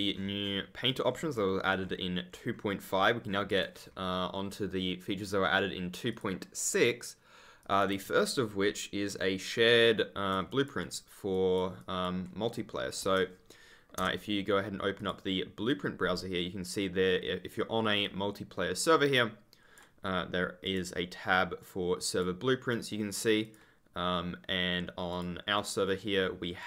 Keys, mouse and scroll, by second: 0.8 ctrl+click, 1.1-1.4 scroll up 1, 1.8-3.3 scroll up 1, 6.0 click, 7.6 click, 8.2 ctrl+click, 8.3-9.5 scroll up 1, 9.5 ctrl+click, 14.9 click, 18.0 click, 20.6 click, 22.0 click, 23.4 click, 25.0 click, 25.8 scroll down 1, 26.5 click.